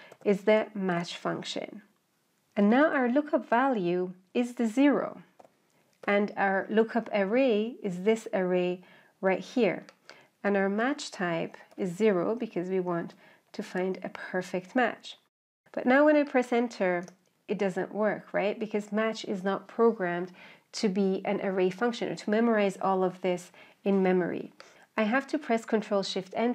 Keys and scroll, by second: 25.8 ctrl+shift+Return.